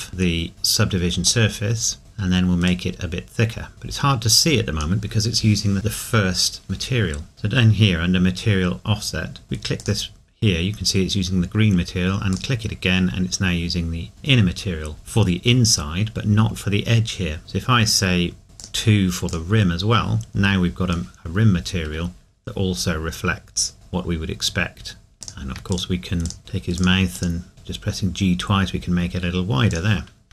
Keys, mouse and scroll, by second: 1.5 middle click, 2.7 click, 9.8 click, 12.3 click, 14.9-16.1 scroll up 2, 16.1-17.0 scroll up 1, 18.6 click, 21.1 middle click, 22.0 scroll down 1, 24.5 scroll down 1, 25.1 middle click, 25.2 click, 27.5 g, 29.7 click.